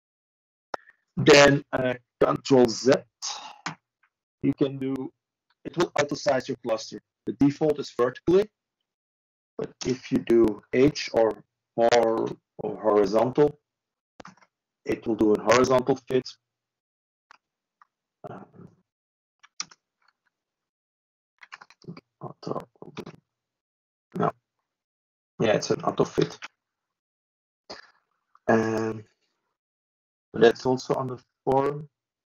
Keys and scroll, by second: 5.8-6.5 typing, 9.7 ctrl+e, 13.6 ctrl+space, 15.3 ctrl+s, 21.3 ctrl+e, 31.4 2.